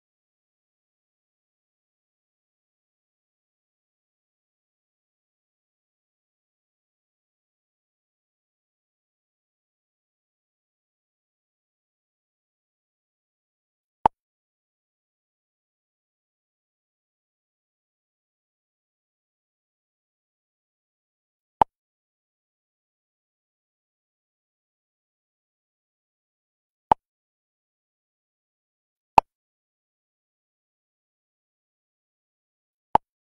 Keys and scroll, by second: 6.4 Up.